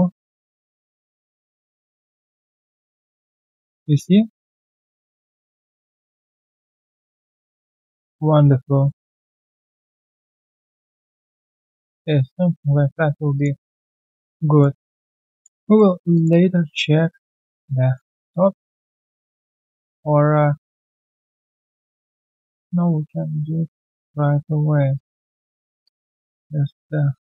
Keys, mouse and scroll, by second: 0.1-0.6 alt+scroll down 1, 2.0 alt+middle click, 2.7 middle click, 4.9 alt+middle click, 8.2 middle click, 8.2 alt+scroll down 1, 8.5 alt+middle click, 10.6 alt+middle click, 11.7 right click, 12.7-13.1 scroll down 1, 13.6 alt+click, 13.9-14.4 alt+scroll down 1, 14.4 alt+middle click, 15.0 alt+right click, 15.3 alt+click, 15.6 alt+middle click, 15.9 alt+right click, 16.1 alt+click, 16.9 alt+right click, 17.1 alt+middle click, 17.7 right click, 19.8 double click, 20.1 alt+middle click, 22.3 alt+middle click, 22.8 w, 23.3 scroll down 1, 24.9 shift+click, 26.2 alt+middle click, 27.0 alt+middle click.